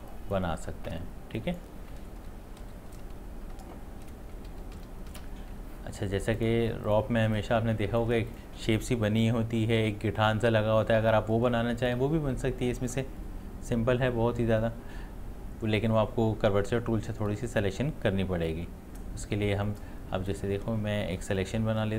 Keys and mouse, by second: 2.6 ctrl+x, 6.3 click, 12.5 click, 18.5-20.5 drag, 20.5 ctrl+z.